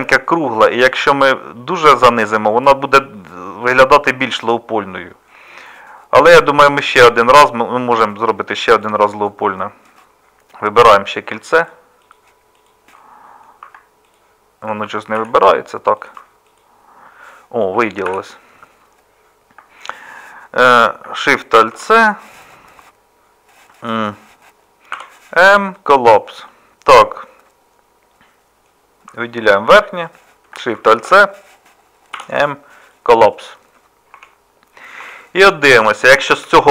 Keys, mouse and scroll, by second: 2.5-6.3 middle drag, 15.2 z, 18.1 z, 21.7 alt+shift+c, 25.0 m, 31.0 alt+shift+c, 32.1 m, 35.0 Tab.